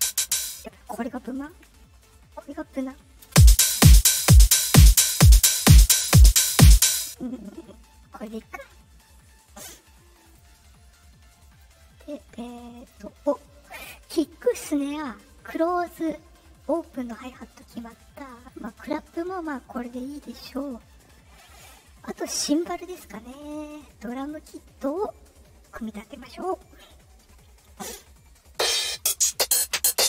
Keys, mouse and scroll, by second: 1.3 ctrl+click, 3.2 space, 6.6 space, 10.2 click, 11.4 click, 12.7 click, 18.4 click, 21.4 click, 22.6 click, 28.4 click, 29.0 Down, 29.9 Up.